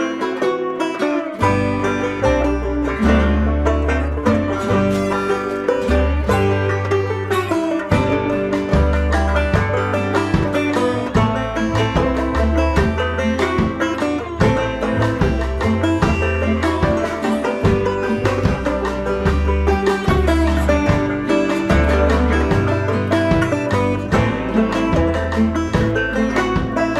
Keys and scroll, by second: 6.1 Return, 11.6 ctrl+t, 19.3 Return.